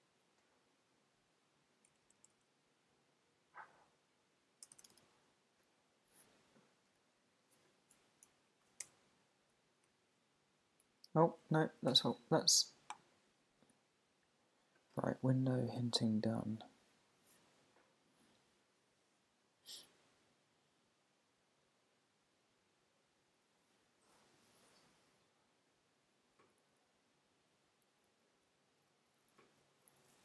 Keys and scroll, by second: 4.7 shift+d, 8.5 shift+super+Left, 10.9 Down, 11.8 Up.